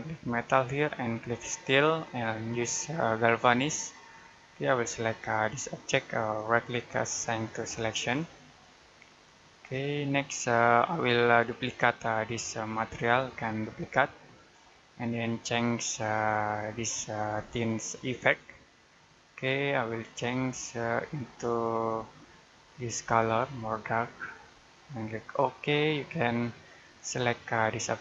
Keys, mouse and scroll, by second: 6.4 right click, 7.8 click, 11.6 right click, 13.6 click.